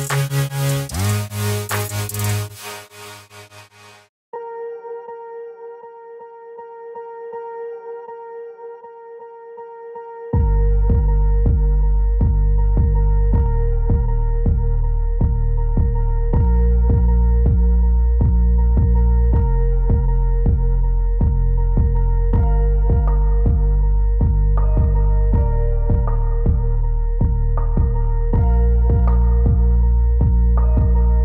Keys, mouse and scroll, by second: 0.2 click, 0.6 click, 2.8 click, 5.4 click, 6.4 click, 6.4 alt+click, 8.6 click, 10.6 click, 12.9 click, 15.1 click, 16.9 click, 18.3 click, 19.3 click, 21.4 click, 22.9 click, 23.9 click, 24.8 click, 29.2 click.